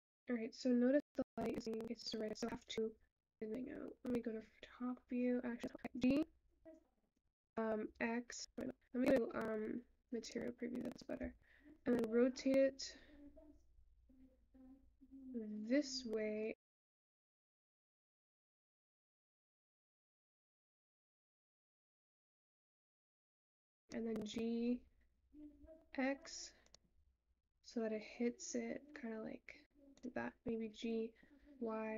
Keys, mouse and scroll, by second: 7.8 `.